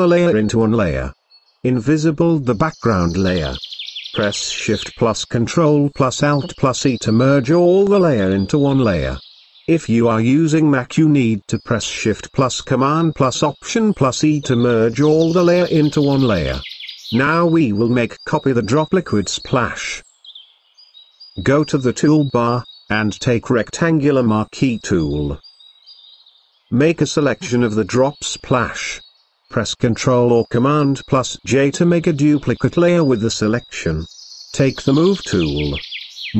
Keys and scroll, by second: 3.8 ctrl+alt+shift+e, 29.1 ctrl+j.